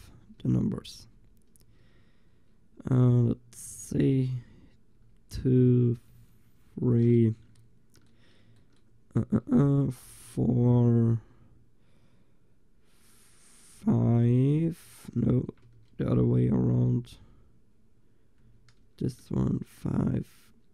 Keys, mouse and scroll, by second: 0.0-1.6 typing, 3.8-7.6 middle drag, 4.2 l, 5.1 l, 6.1 l, 6.7 l, 10.1 l, 10.3 l, 11.2 l, 13.8 l, 14.4-17.0 middle drag, 15.7 ctrl+z, 17.0 l, 18.5 l, 19.2-20.7 right drag.